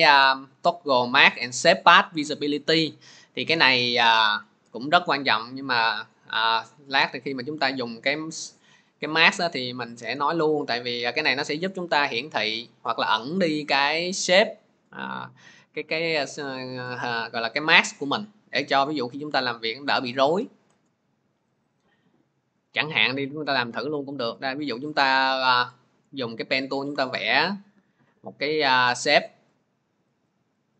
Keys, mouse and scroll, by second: 6.3 click, 21.5 click, 22.5 click, 23.2 click, 24.2-25.0 scroll, 25.7 click, 26.3 scroll, 28.0 click, 28.4 click, 29.6 click, 30.1 click.